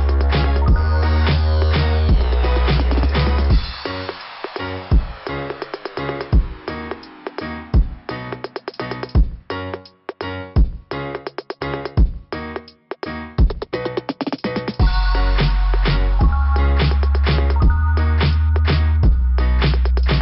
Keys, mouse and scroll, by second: 3.2 click, 6.2 click, 7.3 click, 8.2 click, 10.1 click, 11.8 click, 13.8 click, 13.9 click, 15.4 click, 17.1 click, 17.2 click.